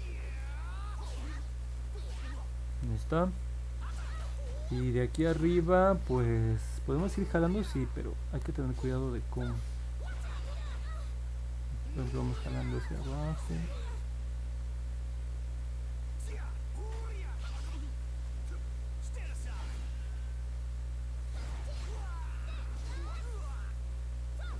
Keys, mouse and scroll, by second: 0.0 click, 0.3 click, 0.6 click, 0.9 click, 1.2 click, 1.5 click, 1.8 click, 2.1 click, 2.3 click, 7.7 click, 8.4 click, 9.3 click, 9.9 click, 10.3 click, 10.8 click, 11.3 click, 14.3 click, 14.7 click, 15.0 click, 15.7 click, 16.0 click, 16.6 click, 16.9 click, 17.2 click, 17.6 click, 18.0 click, 18.3 click, 18.7 click, 19.0 click, 19.3 click, 19.7 click, 20.0 click, 20.3 click, 20.6 click, 20.9 click, 21.2 click, 21.6 click, 21.9 click, 22.2 click, 22.5 click, 22.8 click, 23.1 click, 23.4 click, 23.7 click, 24.0 click, 24.3 click.